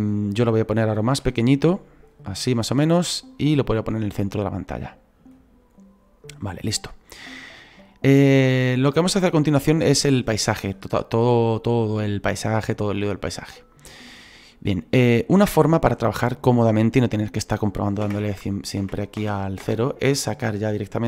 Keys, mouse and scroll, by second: 6.0-7.8 scroll up 2, 7.8 scroll down 2, 14.4-18.2 middle drag, 18.8 KP_0, 19.6 KP_0.